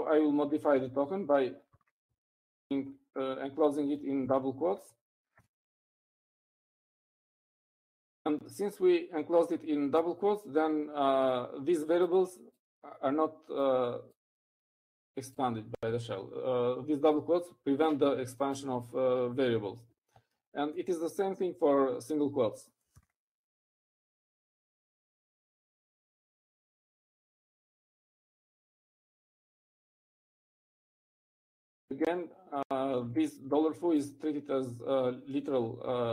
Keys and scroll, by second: 0.8 Right, 1.2 Right, 1.5 Right, 1.8 Right, 3.3 shift+', 4.2 Right, 4.7 Right, 22.5 Up, 24.3 ctrl+a, 25.7 Right, 25.8 Right, 26.2 Right, 26.3 Right, 26.5 Right, 27.2 Right, 28.7 ', 28.7 _, 29.2 Right, 31.7 Right, 31.7 '.